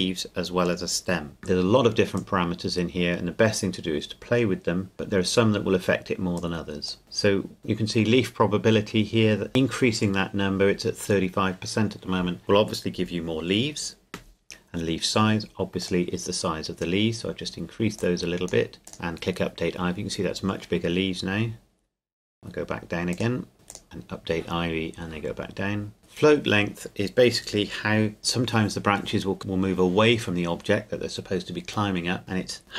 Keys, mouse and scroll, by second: 2.2 click, 15.8-20.4 drag, 21.5 scroll down 1, 23.1 click, 23.5 scroll up 1, 23.7 click.